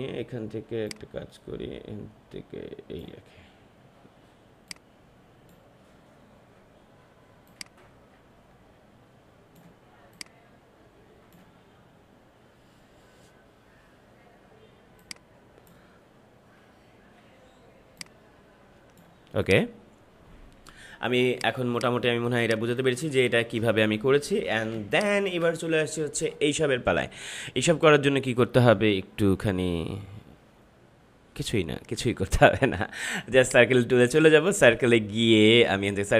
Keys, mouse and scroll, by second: 14.9-17.9 drag, 17.9-19.4 drag, 22.2 space, 22.4 click, 23.0 space, 23.6 ctrl+-, 24.7 space, 24.9 click, 25.2 space, 33.3-36.1 drag.